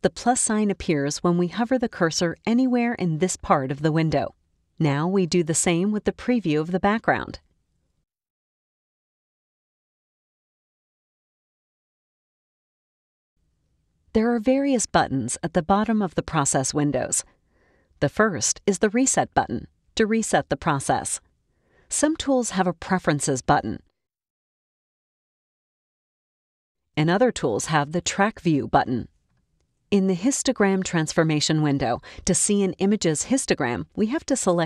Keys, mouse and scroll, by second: 4.0-5.9 ctrl+scroll up 3, 6.1-8.5 ctrl+drag, 18.7-19.0 scroll up 1, 23.6 click, 25.4 click, 34.5 click.